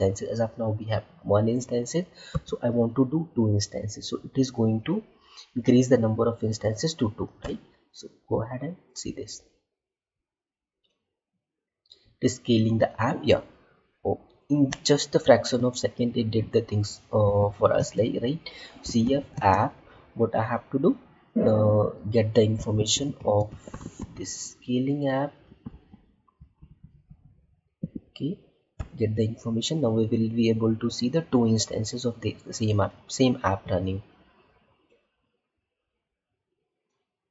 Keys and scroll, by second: 17.7 space, 19.2 space, 25.6 Left.